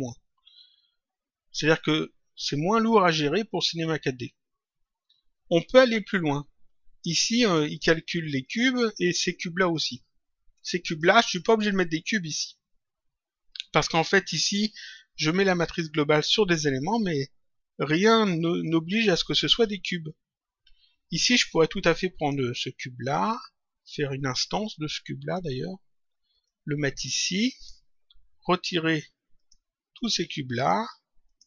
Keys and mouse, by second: 7.3 click, 10.8 click, 19.5 click, 22.1 click, 24.1 click, 26.4 click, 28.4 click, 28.8 Delete, 29.3 click, 29.6 Delete, 29.9 click, 30.2 Delete, 30.5 click, 30.8 Delete, 31.2 click.